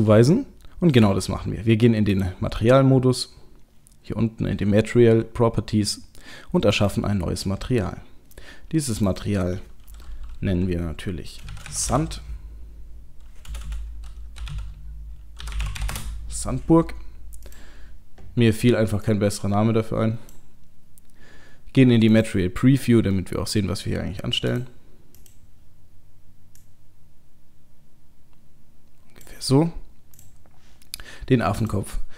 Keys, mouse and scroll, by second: 0.4 shift+middle click, 2.1 click, 6.6 click, 8.9 click, 13.7 BackSpace, 17.5 click, 22.1 click, 23.2 middle click, 23.8 middle click, 24.5 click, 25.2 click, 30.2 click, 31.6 click.